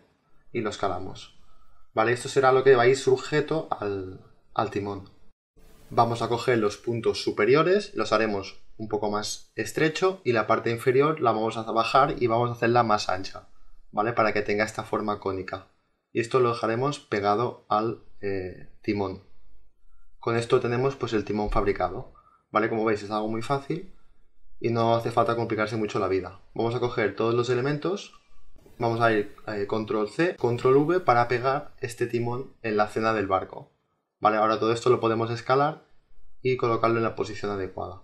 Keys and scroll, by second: 6.6 t, 9.5 space, 13.2 t, 27.3 ctrl+c, 31.1 ctrl+v.